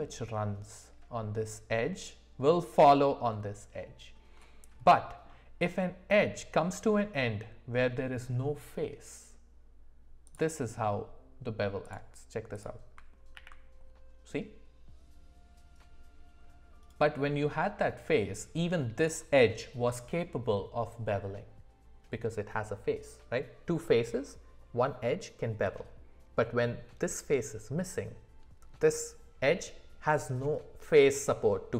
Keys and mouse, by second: 4.9 middle click, 10.3 click, 11.9 click, 12.5 click, 13.3 ctrl+b.